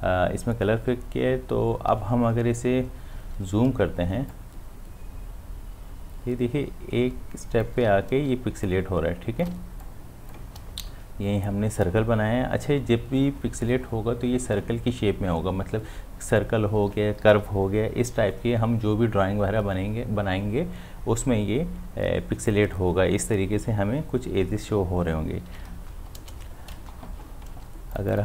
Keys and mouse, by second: 3.3 space, 4.3-8.3 ctrl+drag, 8.3 space, 8.7 ctrl+click, 9.5 space, 9.9 click, 10.1 space, 27.1 v, 27.6 space, 27.9 ctrl+click.